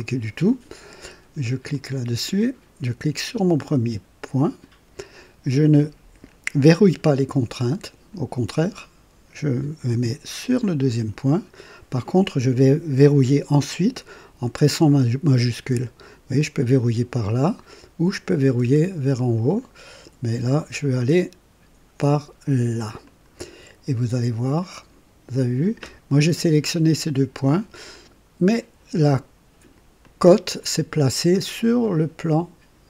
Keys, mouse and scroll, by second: 1.7 click, 4.4 click, 10.8 click, 23.0 click, 23.9-25.5 drag, 27.9-29.9 drag, 30.0 click, 31.3 click.